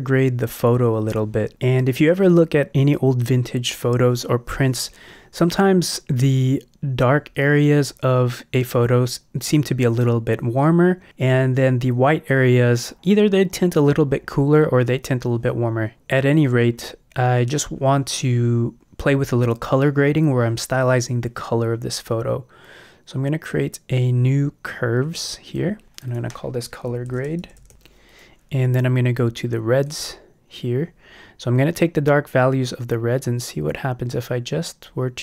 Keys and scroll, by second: 26.9-27.9 typing.